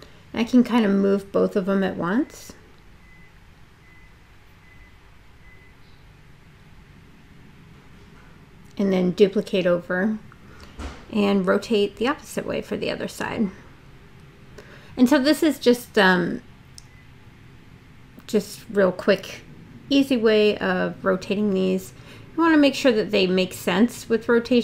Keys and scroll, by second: 0.9 super+d, 6.0 e, 11.0 w, 17.3 space.